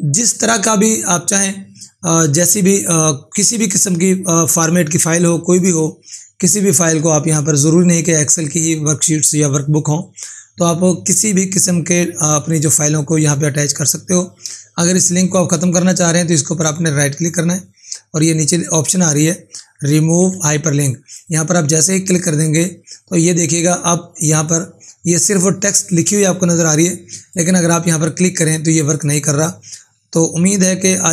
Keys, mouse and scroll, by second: 16.5 right click, 20.2 ctrl+4, 30.3 ctrl+4.